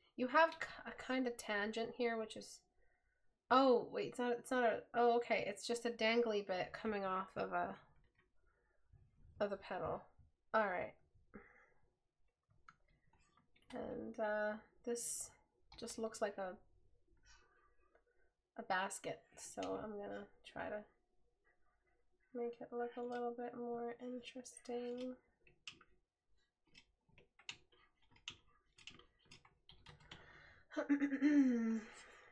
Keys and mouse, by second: 11.4 right click.